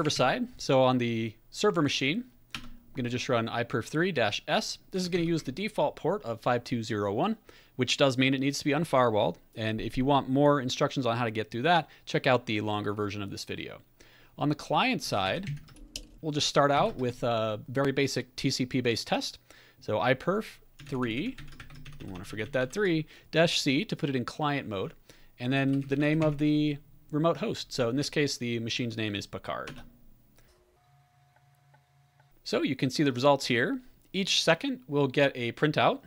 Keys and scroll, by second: 0.0-0.6 typing, 2.5 Return, 5.0 ctrl+a, 5.1 ctrl+l, 14.8-16.8 typing, 20.8 Left, 21.0 Left, 21.1 Left, 21.3 Left, 21.6 typing, 21.8 Right, 22.0 Right, 22.1 Right, 22.2 Right, 22.4 Right, 22.7 Right, 25.3-26.7 typing, 29.6 Return.